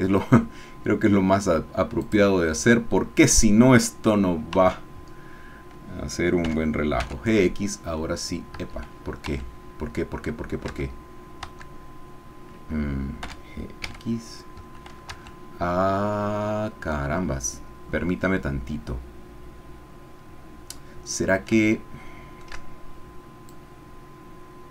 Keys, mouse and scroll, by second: 2.0 click, 4.5 Tab, 6.4 g, 7.0 x, 8.5 Escape, 9.3 Tab, 10.0-11.4 scroll down 2, 10.8 Tab, 11.5 Tab, 13.2 g, 13.8 x, 14.6 Escape, 15.2 Tab, 21.6 shift+middle click, 23.5-24.7 drag.